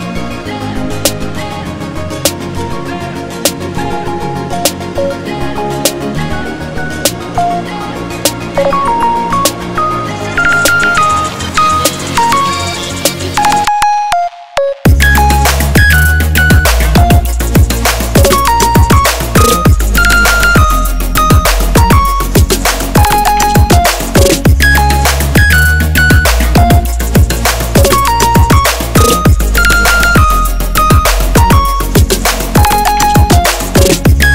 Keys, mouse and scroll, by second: 1.4 ctrl+z, 2.0 click, 2.4 right click, 4.1 click, 8.3-8.8 shift+drag, 8.9-9.7 right drag, 9.7-12.0 drag, 12.0 Delete, 12.4 click, 13.0 Delete, 14.4 Delete, 14.7 click, 17.5-19.6 shift+drag, 22.1-26.1 drag, 29.1 alt+scroll down 1, 29.5 alt+scroll up 1, 29.8 shift+click, 30.5 click.